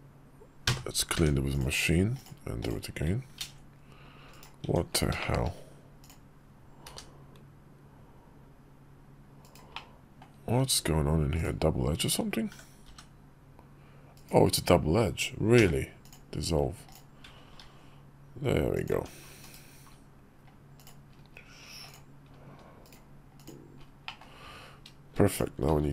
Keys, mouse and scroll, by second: 0.4 3, 0.9 Tab, 1.2 click, 1.9 click, 2.3 click, 3.1 ctrl+b, 4.4 Tab, 4.9 shift+click, 5.7 click, 6.6 g, 9.4 middle click, 10.3 Tab, 11.1 click, 12.2 f, 12.6 g, 15.3 x, 16.6 click, 17.3 ctrl+b, 18.6 Tab, 19.1 /, 20.6-21.8 drag, 22.6 click, 23.8 middle drag, 25.1 click, 25.4 alt+x.